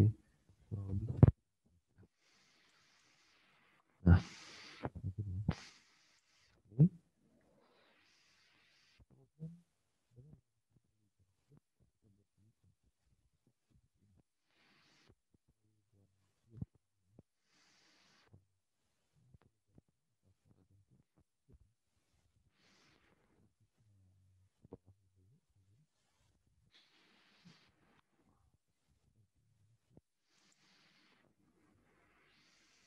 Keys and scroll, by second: 6.3 alt+Tab, 14.0 alt+Tab, 19.7 alt+Tab, 21.4 alt+Tab.